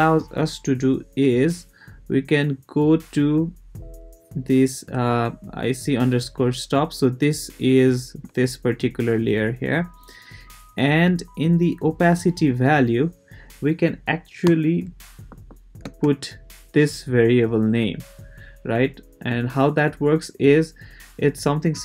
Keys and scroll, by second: 14.4 Return, 15.3 =, 15.8 space.